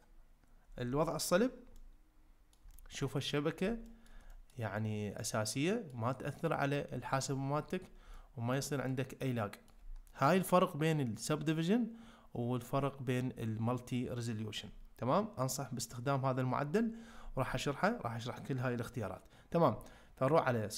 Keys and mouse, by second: 1.0 shift+middle click, 1.8-2.6 middle drag, 2.7 shift+middle drag, 3.2-3.6 middle drag, 3.8 shift+middle drag, 4.3 ctrl+middle click, 4.8-5.9 middle drag, 8.1-8.5 ctrl+middle drag, 8.9-9.7 middle drag.